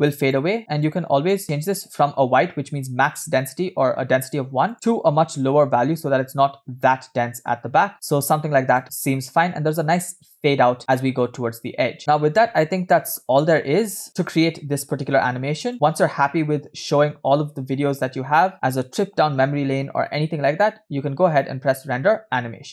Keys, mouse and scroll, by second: 0.2 click, 0.9 click, 1.3 click, 1.7-2.1 drag, 4.7 click, 12.0 space, 12.5 space, 13.4 space, 14.1-15.7 drag, 21.3-22.7 drag.